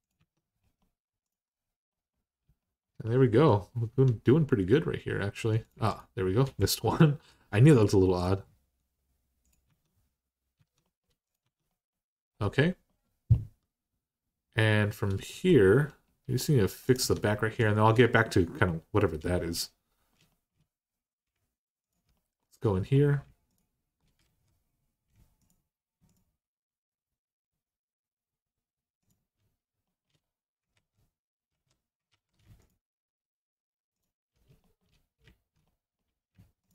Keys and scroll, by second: 0.0 Tab, 0.0 i, 3.7 Tab, 9.5 Tab, 10.4 Tab, 11.2 Tab, 16.8 Tab, 24.0 alt+z, 30.5 ctrl+z, 31.3 ctrl+z, 31.9 ctrl+z.